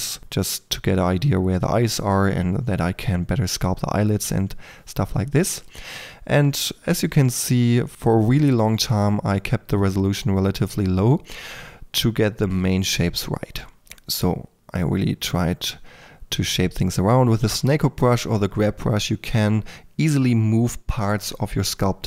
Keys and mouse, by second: 0.0 s, 0.7 Tab, 1.1 Tab, 1.2-3.2 typing, 3.9 Tab, 4.2 Tab, 4.2-7.3 typing, 4.6 Tab, 5.9-6.3 drag, 6.4 click, 7.7-9.1 drag, 9.1-13.3 typing, 9.7 drag, 14.4-22.0 typing.